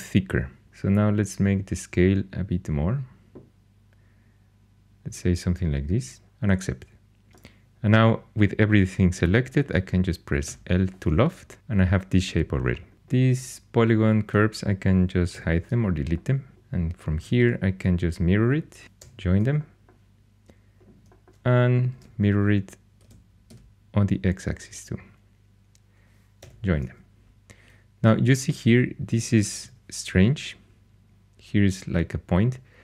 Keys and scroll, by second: 10.4 l, 12.9 4, 15.3 h, 17.0 alt+x, 17.4 alt+x, 18.6-19.5 typing, 21.9 alt+x, 22.8-24.0 typing, 26.4 j, 29.6 shift+h.